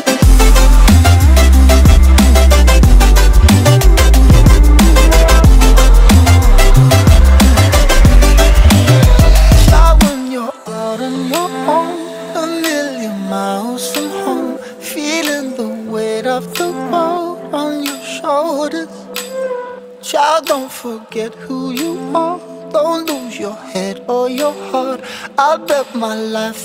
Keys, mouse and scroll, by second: 2.5 KP_0, 2.8 KP_0, 3.4 click, 6.1 click, 7.5 click, 8.0-9.8 drag, 10.4 click, 11.7 click, 12.4 click, 14.0 click, 14.4 click, 17.9 click, 18.4-23.2 drag, 24.8 ctrl+s, 25.9-26.4 scroll down 1, 26.5 g, 26.5 g.